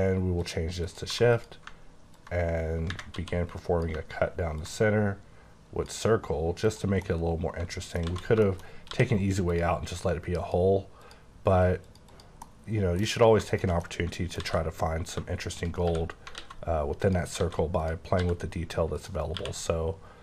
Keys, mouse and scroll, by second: 0.4 click, 0.9 click, 1.1 1, 1.3 click, 3.2 d, 4.6 ctrl+click, 7.0 scroll down 1, 7.2 middle click, 8.1 z, 8.4 shift+middle click, 8.7 shift+scroll up 3, 8.9 d, 9.5 click, 10.0 click, 11.0 click, 11.9 click, 12.1 double click, 12.4 middle click, 12.9 KP_1, 13.0 KP_1, 13.0 KP_1, 13.5 shift+click, 13.8 middle click, 14.4 alt+z, 15.4 shift+click, 15.8 q, 16.3 alt+x, 17.0 click, 17.4 alt+a, 17.8 click, 18.2 g, 19.0 click, 19.3 q.